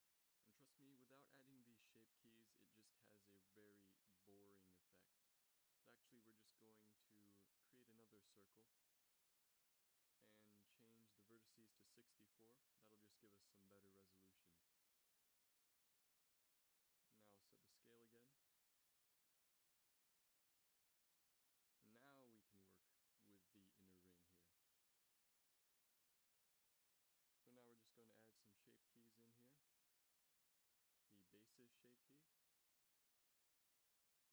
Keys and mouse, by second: 2.0 middle drag, 2.4 shift+s, 5.3 x, 6.1 shift+a, 10.8 F6, 14.7 s, 16.7-17.6 drag, 17.6 ctrl+v, 18.1 ctrl+v, 18.6 ctrl+v, 20.4 ctrl+s, 22.4 Tab, 23.0 e, 23.6 s, 27.1 Tab.